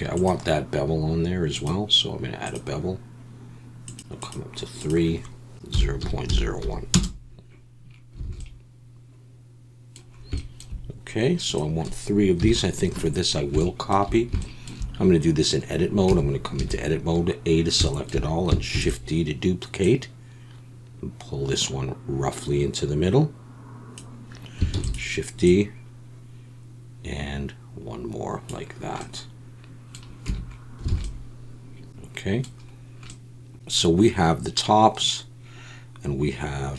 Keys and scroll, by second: 8.3 alt+a, 12.4 KP_1, 16.1 Tab, 16.6 a, 18.7 shift+d, 24.7 shift+d, 30.3 Tab, 30.9 alt+a.